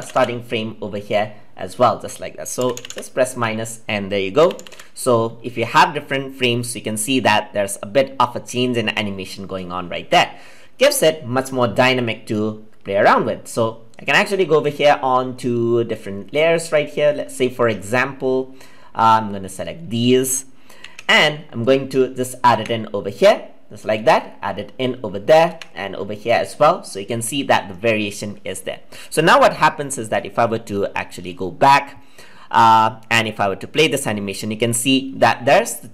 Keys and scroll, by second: 20.8 ctrl+c, 22.5 ctrl+v.